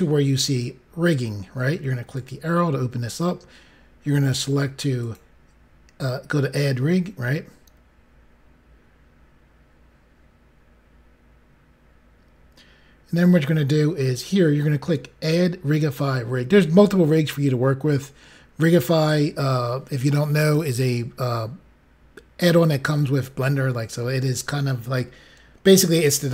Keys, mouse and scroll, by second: 2.1 click, 4.9 click.